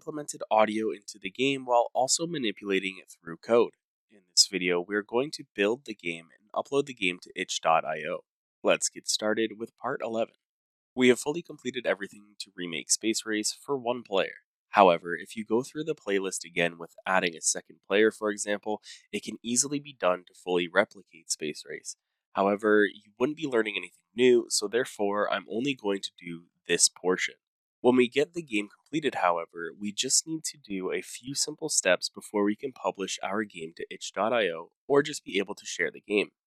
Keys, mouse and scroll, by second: 0.0 scroll down 1, 0.1-0.6 scroll down 9, 0.5-1.9 typing, 0.5 click, 0.7 scroll, 1.6 scroll.